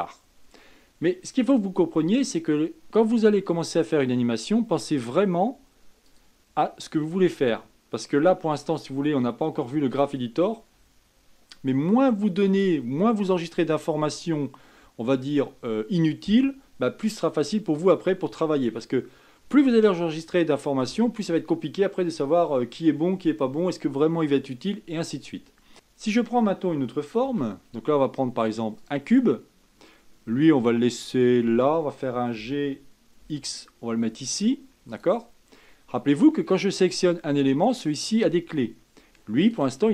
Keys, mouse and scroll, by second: 5.2-11.7 drag, 25.7 shift+a, 27.5 shift+a, 32.6 g, 37.1 click, 39.8 click.